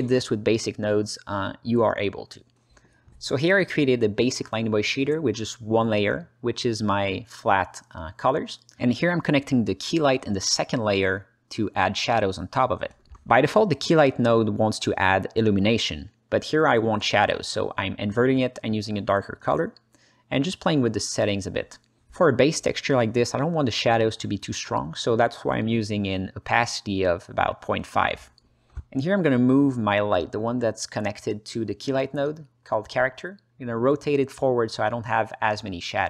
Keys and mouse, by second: 3.3 click, 4.8-5.2 alt+middle drag, 6.5 shift+a, 9.3-10.3 drag, 10.5 click, 12.0 drag, 12.6 click, 13.1 h, 13.6 alt+middle click, 14.1 ctrl+alt+middle click, 14.6 alt+middle click, 15.2 click, 17.3-17.6 drag, 19.2-21.8 drag, 22.5-25.3 drag, 25.9-26.5 alt+middle drag, 27.6 click, 28.6 g, 29.1 click, 29.4 drag, 30.4 click, 33.5-36.0 drag.